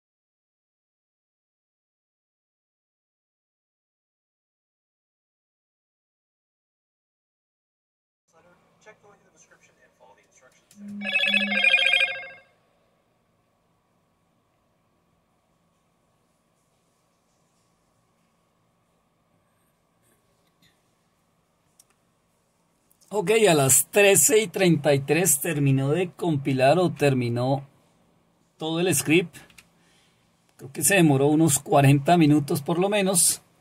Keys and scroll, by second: 27.0 Up, 29.5 Down.